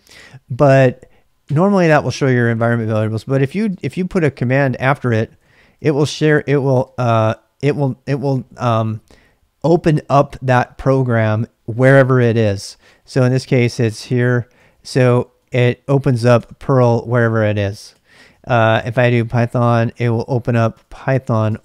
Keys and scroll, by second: 3.1-7.8 typing, 6.8 ctrl+c, 12.4 ctrl+c, 12.4-15.3 typing, 16.3 Return, 16.8-21.5 typing, 17.9 ctrl+c.